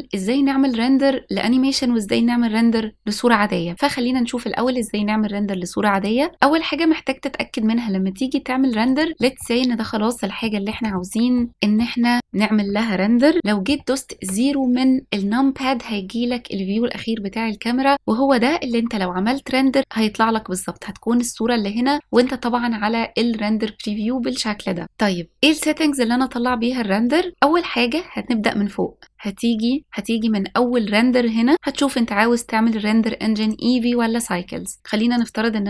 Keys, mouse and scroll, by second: 5.9 click, 8.8 click, 9.2 middle drag, 10.4-10.7 shift+middle drag, 10.9-11.4 middle drag, 11.5 middle drag, 11.5 scroll up 1, 14.1 KP_0, 15.8 scroll up 1, 22.1-25.4 drag, 29.0 click, 29.8 click, 33.4-35.4 drag.